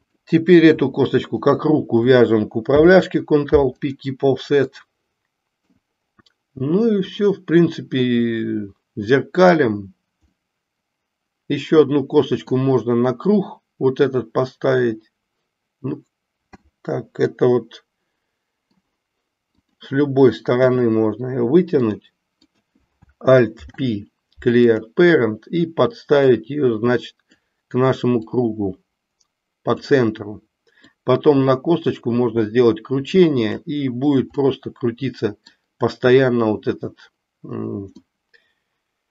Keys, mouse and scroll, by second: 0.0 click, 1.3 shift+click, 2.6 ctrl+p, 4.7-5.7 middle drag, 7.3-9.5 middle drag, 10.4-12.6 middle drag, 17.3-18.9 middle drag, 19.5 click, 20.6 e, 22.3 click, 23.4 alt+p, 26.3-27.4 drag, 28.3-29.7 drag, 30.7-33.5 drag, 34.4 scroll up 1, 34.5-35.5 middle drag, 38.0-39.1 middle drag, 38.0 scroll up 1.